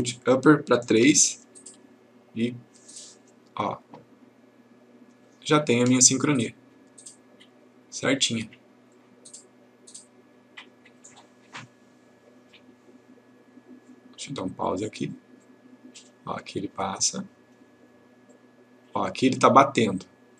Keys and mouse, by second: 1.1 3, 1.5 click, 3.3 click, 9.0-11.2 click, 14.7 click.